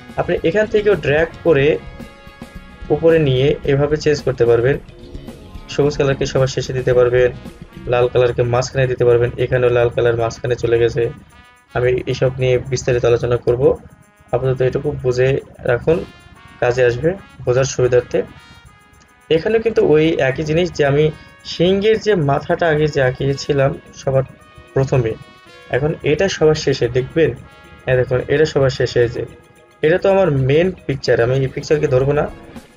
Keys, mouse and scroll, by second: 1.1-15.1 drag, 15.2 click, 19.2 space, 19.4 click, 19.7 space, 29.4 scroll down 1.